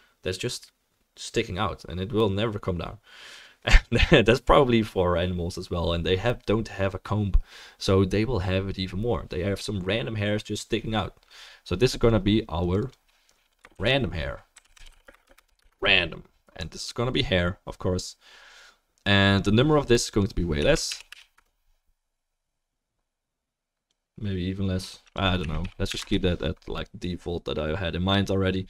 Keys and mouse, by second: 20.2-28.6 drag, 20.2-28.6 middle drag, 21.1 4, 25.9 4.